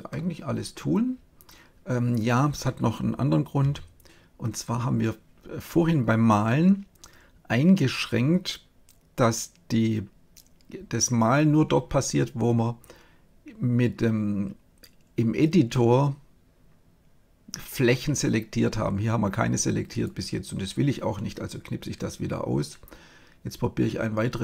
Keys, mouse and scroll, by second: 3.5 KP_7, 19.9-21.7 drag.